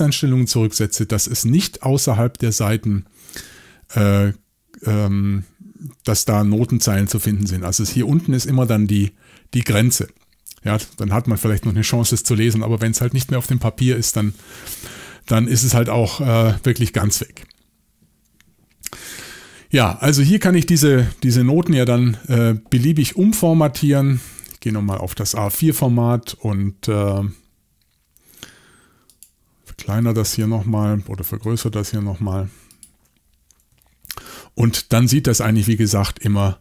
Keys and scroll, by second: 21.7 shift+super+l.